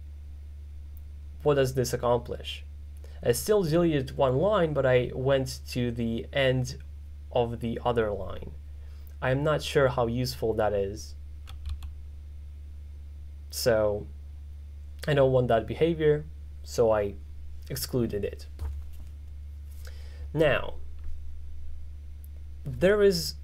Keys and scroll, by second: 11.8 u.